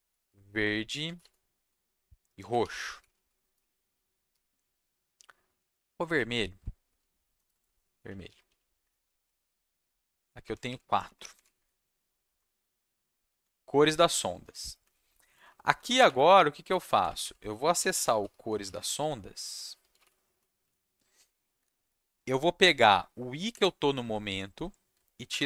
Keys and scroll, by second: 0.0-1.0 typing, 2.1-4.3 typing, 5.5 Left, 5.6 Left, 5.7 Left, 6.6-8.7 typing, 8.8 Escape, 9.2 Right, 10.4 Right, 10.6 Left, 10.8-11.9 typing, 12.3 Return, 14.8 Down, 15.0 Down, 15.2 Down, 15.3 Down, 15.4 Down, 15.6 Down, 15.7 Down, 16.7 shift+Left, 16.9 shift+Left, 17.0 shift+Left, 17.2 shift+Left, 17.4-20.8 typing, 23.5 i, 25.3 shift+5.